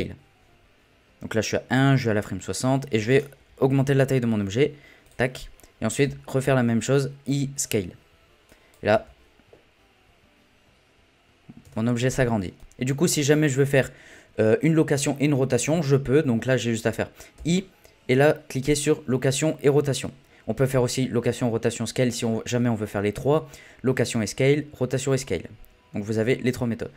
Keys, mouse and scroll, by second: 1.4-3.5 drag, 3.5 s, 6.0 i, 8.5 click, 8.9 space, 11.6 space, 12.9-13.2 scroll down 1, 13.2 middle click, 13.6-16.7 scroll up 3, 17.4 i.